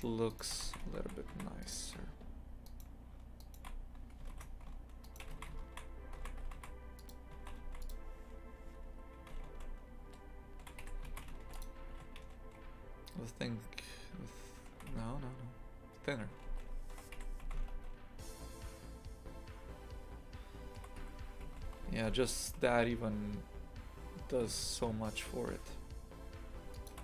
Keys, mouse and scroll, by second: 0.3 alt+shift+right click, 0.6 shift+f, 2.6-4.3 alt+shift+right drag, 4.3 ctrl+z, 5.0 alt+shift+right click, 5.3 shift+f, 7.4 shift+f, 9.2 s, 11.1 shift+f, 11.9 s.